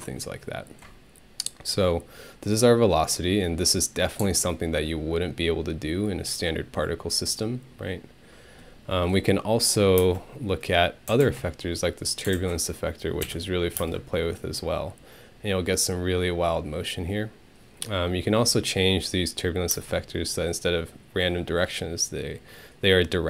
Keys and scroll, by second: 10.0 space, 13.2 ctrl+Home, 13.8 space, 19.8 space.